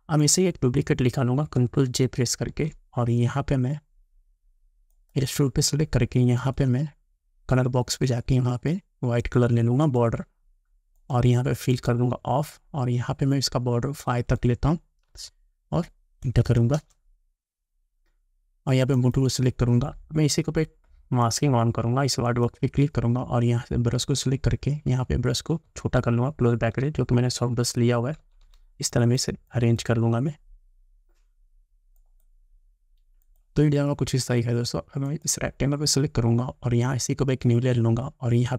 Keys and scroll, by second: 15.2 5, 25.7 [.